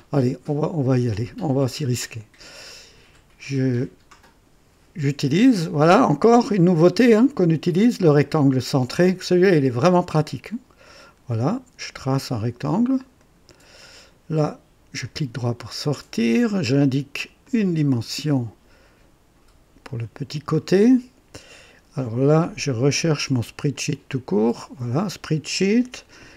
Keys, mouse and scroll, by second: 2.1 click, 5.7 click, 8.5 click, 10.8 click, 13.1 click, 13.8 right click, 15.0 right click, 16.1 click, 17.4 click, 19.8 click, 22.8 click, 23.7 click, 24.6 ctrl+v.